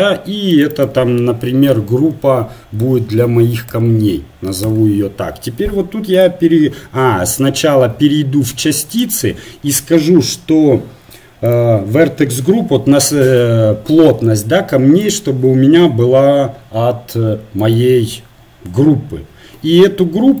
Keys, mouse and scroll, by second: 7.0-17.8 drag.